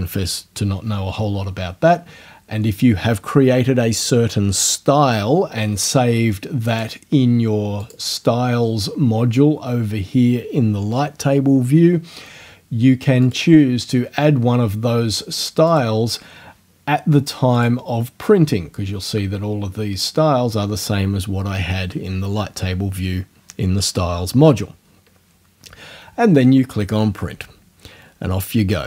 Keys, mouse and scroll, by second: 6.7 click, 7.8 click, 13.2 click, 15.7 click, 17.6 click.